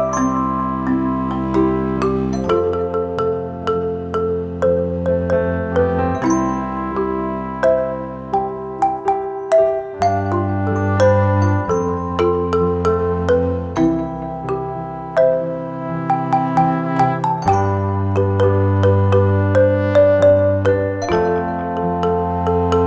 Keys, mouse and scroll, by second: 0.8-13.8 shift+drag, 17.0-22.8 drag.